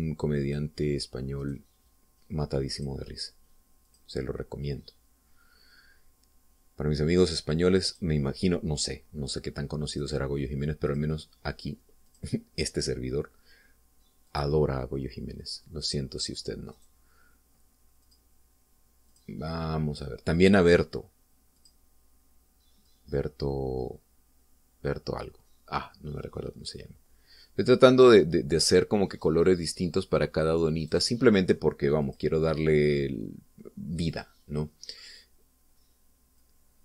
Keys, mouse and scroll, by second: 0.2 click, 1.5 click, 2.5 right click, 3.8 click, 4.9 click, 8.9 click, 9.8 scroll down 2, 11.1 right click, 11.9 click, 13.1 click, 15.3 click, 17.8 right click, 19.1 click, 20.2 click, 22.7 click, 24.0-30.5 drag, 31.9 right click, 33.1 click, 35.1 click.